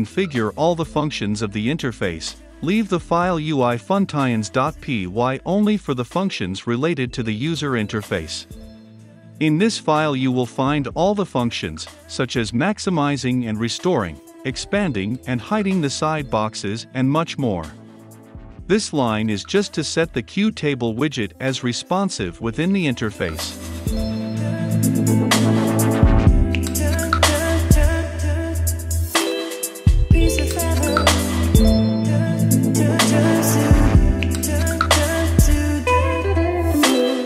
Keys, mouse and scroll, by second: 0.4-3.1 scroll up 2, 3.1-3.7 scroll down 2, 3.7-5.2 drag, 7.6 ctrl+F5, 10.2-18.0 drag, 20.3-22.5 drag, 23.9-26.4 drag, 26.9-30.8 drag, 31.2 ctrl+F5, 32.5-37.2 drag.